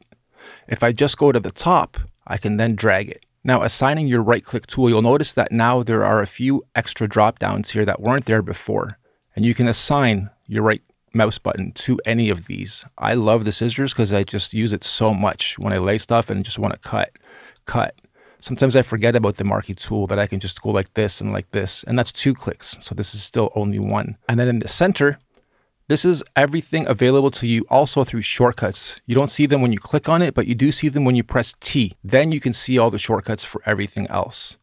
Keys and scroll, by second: 31.9 t.